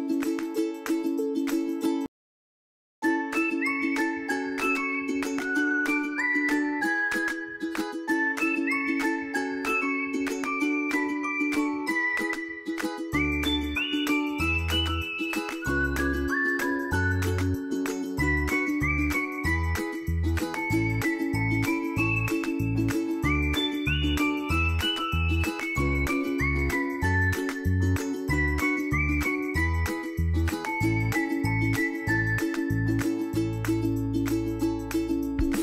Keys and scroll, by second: 16.5 ctrl+a.